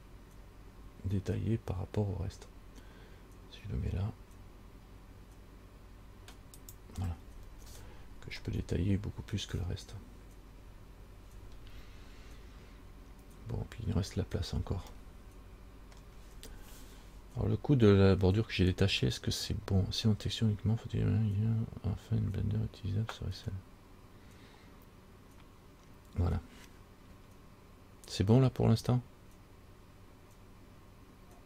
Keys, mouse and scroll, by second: 7.4-8.6 scroll up 6, 8.6 scroll down 2, 11.6-12.1 scroll down 2, 14.2-15.0 scroll down 2, 15.1 middle click.